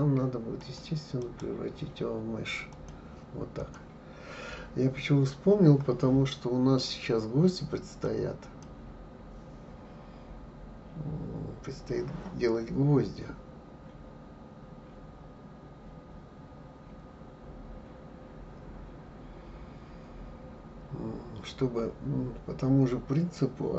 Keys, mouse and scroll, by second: 0.6 click, 1.2-3.6 right drag, 3.6 click, 8.0 click.